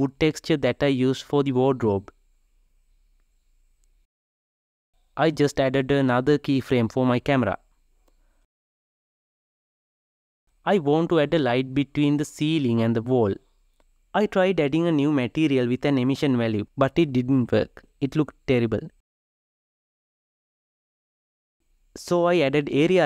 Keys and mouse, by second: 0.0 click, 0.9-3.3 drag, 3.5-4.7 drag, 4.7 Right, 5.3 r, 6.1 g, 6.8 g, 12.8 click, 15.5-17.3 drag, 17.3 Tab, 21.1 click.